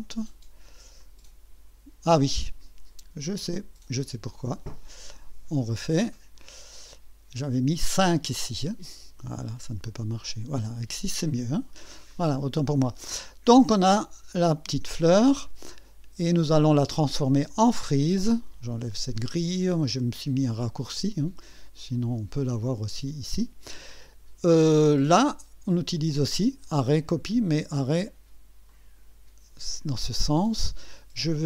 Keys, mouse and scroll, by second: 1.0 click, 5.1 click, 7.8 click, 9.8 click, 11.5 scroll down 2, 12.1-12.8 right drag, 13.1-13.4 scroll up 2, 13.7-14.5 right drag, 15.1 scroll down 2, 15.7-16.2 right drag, 16.2-16.6 scroll down 2, 16.6 scroll up 2, 16.9-17.6 right drag, 21.5 click, 26.8 click, 28.7 click, 31.3 click.